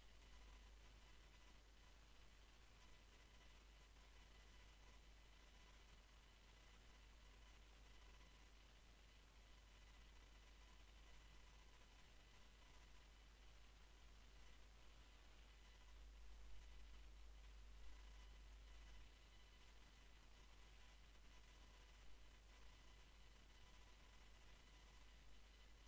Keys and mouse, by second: 0.1 x, 1.5 KP_1, 3.0 ctrl+r, 6.3 ctrl+r, 8.9 ctrl+r, 12.2 ctrl+r, 15.7-16.4 drag, 17.0 a, 17.2 a, 17.5 a, 19.7 r.